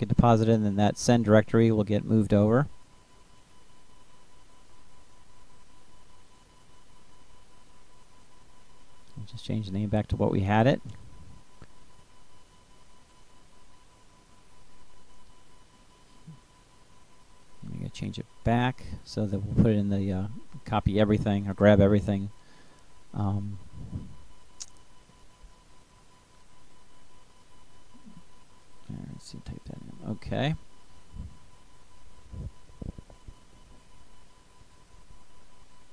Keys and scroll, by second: 6.7 BackSpace, 23.5 BackSpace, 24.7 Right, 25.0 BackSpace, 26.8 [, 27.9 shift+6, 30.0 \, 31.0 ., 32.4 ].